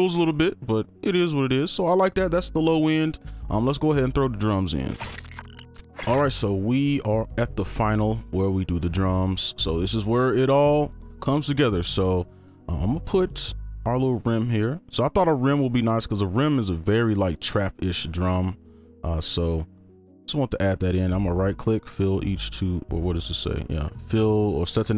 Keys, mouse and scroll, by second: 0.2 double click, 21.1 right click.